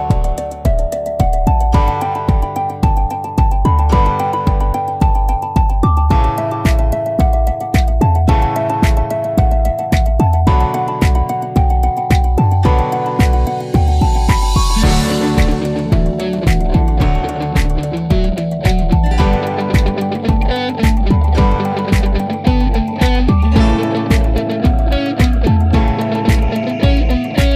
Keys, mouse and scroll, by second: 1.7 Return, 2.1-5.4 drag, 5.4 Return, 6.7 click, 8.0 click, 11.5-15.3 drag, 19.6 Delete, 21.6 ctrl+d, 23.0 click, 24.7 Down, 27.0 Return.